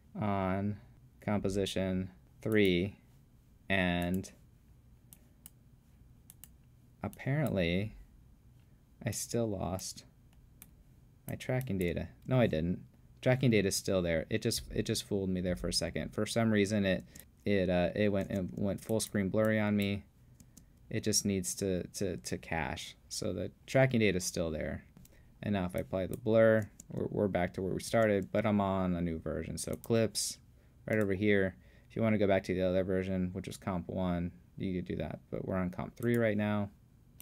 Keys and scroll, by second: 12.3 space, 17.0 space, 18.3 space, 20.4 space, 24.9 space, 26.7 space, 27.9 space.